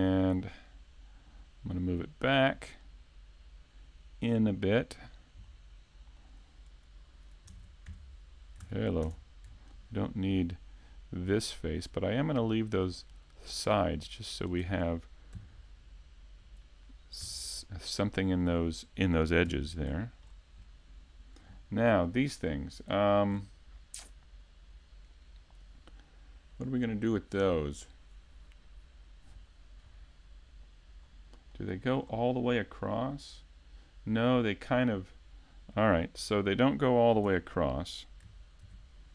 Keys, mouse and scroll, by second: 1.4 click, 5.5 middle click, 7.5 ctrl+Tab, 7.9 3, 8.6 ctrl+Tab, 9.7 right click, 10.9 click, 17.2 Tab, 17.2 k, 17.6 middle click, 19.4 KP_5, 19.9-20.7 scroll down 3, 20.6 middle click, 21.5 shift+middle click, 22.5 scroll up 2, 22.9-23.3 scroll down 1, 23.4-23.9 scroll down 2, 31.0-32.2 scroll up 2, 31.5 middle click, 32.2-33.9 scroll up 2, 35.9 middle click, 37.3 Tab, 38.6 ctrl+r.